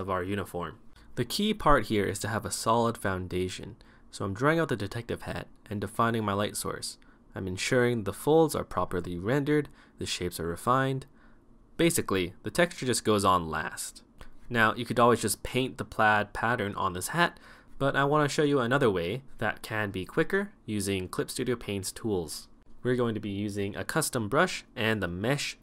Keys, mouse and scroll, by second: 0.0-12.2 typing, 0.2 right click, 0.3 right click, 0.6 right click, 0.8 right click, 1.0 right click, 1.4 right click, 1.7 right click, 2.4 right click, 2.7 right click, 2.9 right click, 3.2 right click, 3.4 right click, 3.7 right click, 4.0 right click, 4.8 right click, 5.1 right click, 5.8 right click, 6.0 right click, 6.3 right click, 6.6 right click, 6.8 right click, 7.0 right click, 7.3 right click, 8.1 right click, 8.2 right click, 8.5 right click, 9.8 right click, 9.9 right click, 10.1 right click, 10.5 right click, 11.3 right click, 11.5 ctrl+z, 11.6 right click, 11.8 right click, 12.3 ctrl+z, 12.7 right click, 12.9 right click, 13.2 right click, 13.3 right click, 13.4-14.9 typing, 13.5 right click, 13.9 right click, 14.1 right click, 14.3 right click, 14.4 right click, 14.7 right click, 16.5-19.1 typing, 16.8 right click, 16.9 right click, 17.2 right click, 17.4 right click, 17.7 right click, 17.9 right click, 18.2 right click, 18.4 right click, 18.5 right click, 18.6 right click, 19.2 right click, 19.3 right click, 19.7 ctrl+z, 19.8 right click, 19.9 ctrl+z, 20.1 ctrl+z, 20.3 right click, 20.9-25.6 typing, 21.0 right click, 21.1 right click, 21.5 right click, 22.2 right click, 22.4 right click, 22.5 right click, 22.9 right click, 23.4 right click, 24.1 right click, 24.5 right click, 24.9 right click, 25.1 right click.